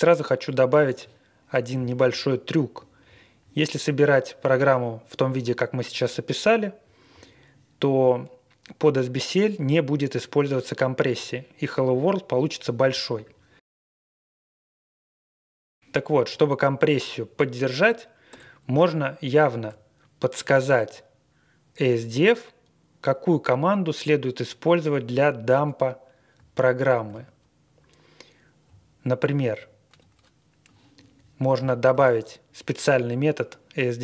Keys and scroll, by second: 18.2 Return, 26.8 super+v, 28.6-29.4 Left, 29.9 Up.